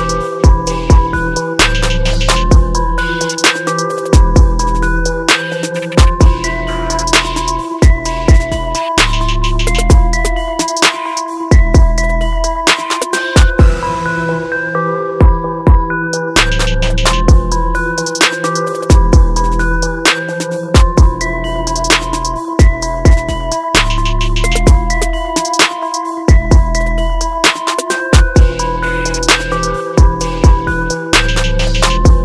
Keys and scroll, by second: 1.0 ctrl+t, 1.6 ctrl+-, 6.7 ctrl+0, 7.4 ctrl+z, 8.2 ctrl+-, 8.8 ctrl+0, 12.4 alt+Tab, 13.3 ctrl+t, 23.2 ctrl+u.